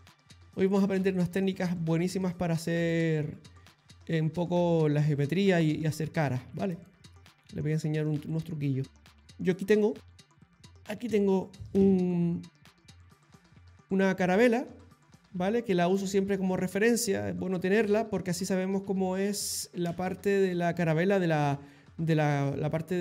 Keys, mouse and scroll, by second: 0.6 middle click, 1.2 shift+click, 3.0 middle click, 5.2 ctrl+middle click, 6.8 shift+middle click.